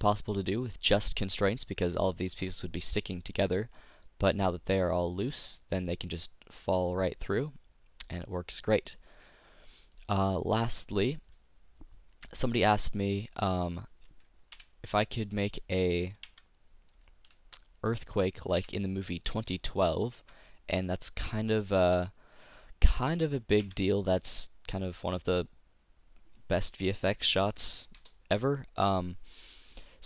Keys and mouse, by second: 3.1-4.2 middle drag, 4.2-6.2 drag, 11.3-13.8 drag, 13.8-15.4 right drag, 14.6 Delete, 16.1-19.7 right drag, 16.4 Tab, 18.6 Delete, 20.1-22.0 right drag, 22.9 f, 23.7 Tab, 24.6 click.